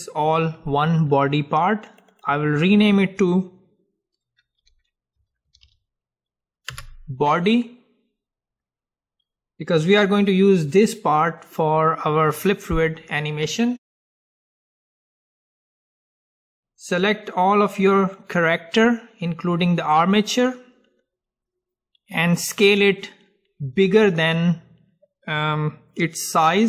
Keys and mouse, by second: 1.9-6.7 drag, 16.1 middle click, 17.0-19.0 drag.